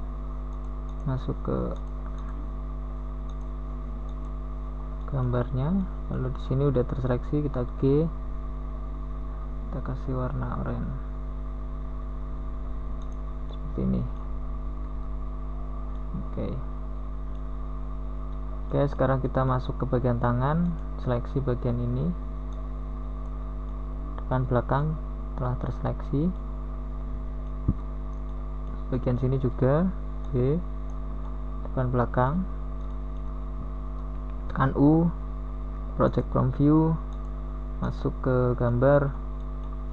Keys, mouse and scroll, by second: 2.6 g, 8.0 KP_1, 10.1 middle click, 10.9 KP_1, 19.5 g, 25.7 middle click, 25.9 middle click, 27.5 Tab, 30.0 KP_1, 31.9 Tab, 32.7 z, 35.3 b, 36.3 z, 37.8 z, 39.7 KP_1.